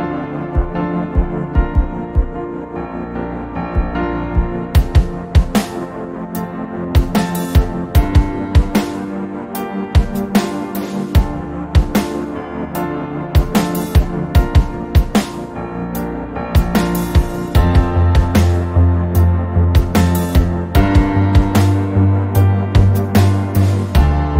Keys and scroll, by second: 1.1-1.4 typing, 5.1 z, 7.4 ctrl+j.